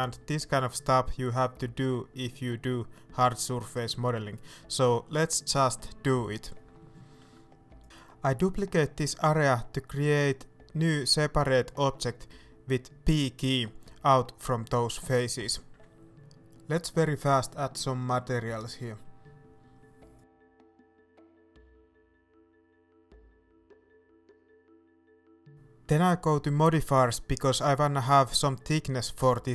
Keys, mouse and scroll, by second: 1.6 scroll down 1, 1.9 middle click, 3.5-3.8 scroll up 1, 3.8 middle click, 4.0 scroll up 1, 5.3 shift+right click, 5.7 scroll down 1, 5.9 middle click, 6.6 ctrl+right click, 7.2 middle click, 7.9 scroll down 1, 8.1 shift+middle click, 8.2-9.0 scroll up 1, 9.1 shift+d, 12.1 right click, 12.5 middle click, 12.9 g, 14.6 right click, 14.8 scroll down 1, 15.0 middle click, 15.2-16.7 scroll up 1, 16.7-21.0 drag, 18.1 Return, 19.2 Return, 19.5 scroll down 1, 21.0 middle click, 21.0 Tab, 21.5 Tab, 23.4 middle click, 24.0 click, 24.0 middle click, 25.1 click, 25.9-26.3 scroll down 1, 27.4-29.5 middle drag, 27.9 scroll up 2.